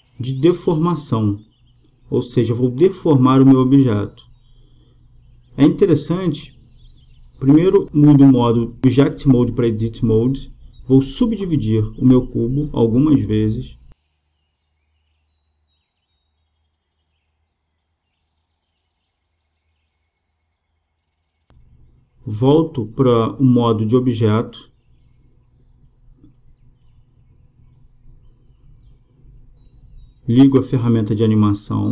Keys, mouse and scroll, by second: 8.5-10.3 drag, 10.7-16.5 middle drag, 16.5-19.4 drag, 23.4-25.3 drag, 26.5-28.2 drag, 30.5-31.9 drag.